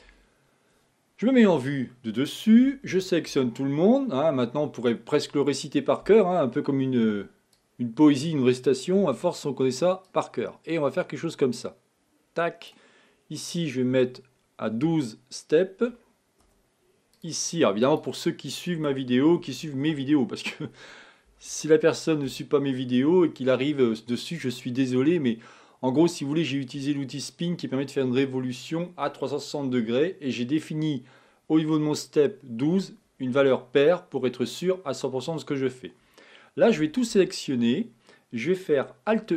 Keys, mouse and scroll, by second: 0.1 a, 1.5 KP_7, 2.7 a, 2.9 a, 3.3 a, 7.6-10.4 drag, 13.7-16.5 drag, 17.2-19.1 drag, 19.1-20.1 typing, 24.9-28.0 middle drag, 36.8 a, 37.1 a, 39.1 alt+m.